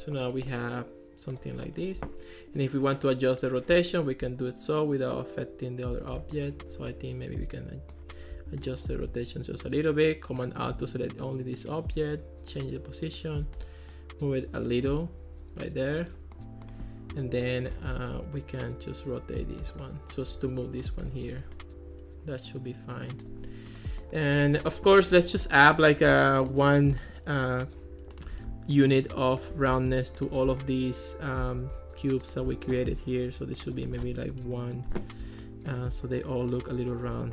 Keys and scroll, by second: 34.0 1, 34.5 Return.